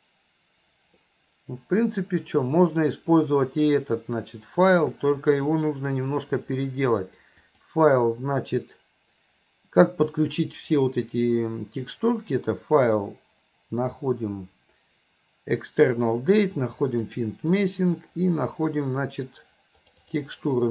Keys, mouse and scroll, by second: 7.5-17.5 drag.